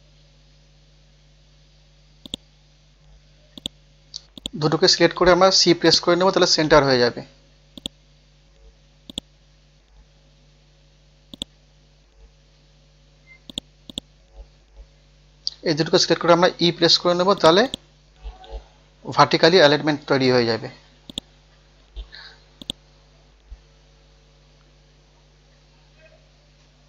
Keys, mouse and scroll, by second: 1.3 scroll down 1, 2.3-4.9 drag, 4.9 scroll down 1, 5.8 click, 6.5-7.6 scroll up 1, 7.8 click, 9.1 right click, 9.6 scroll up 1, 11.3-13.0 drag, 13.0 scroll down 1, 13.5 click, 15.5-17.0 scroll up 1, 17.0 e, 17.4 click, 18.1 scroll up 1, 18.9 scroll up 1, 19.8 scroll down 1, 20.6 scroll up 1, 21.1 click, 22.1-22.4 scroll up 1, 22.6 shift+click, 23.7 scroll up 1, 25.3 c, 25.9 scroll up 1.